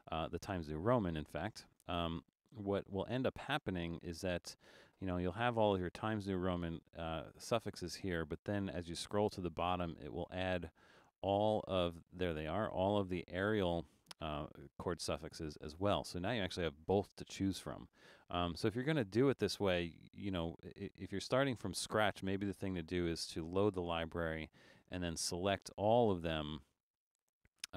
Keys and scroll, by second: 2.6 Return.